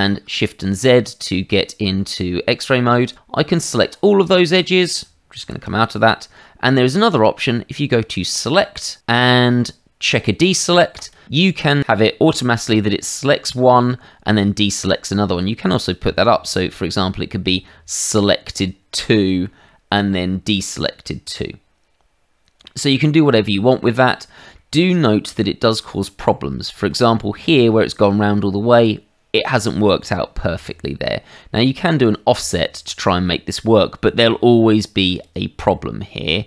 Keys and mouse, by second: 3.1 click, 5.4 shift+z, 8.3 click, 10.9 click, 16.5 click, 19.0 middle click, 19.6 shift+middle click, 20.5 middle click, 22.6 middle click, 23.4 shift+middle click, 24.5 shift+middle click, 25.4 shift+middle click, 26.5 middle click, 32.0 click, 35.1 click.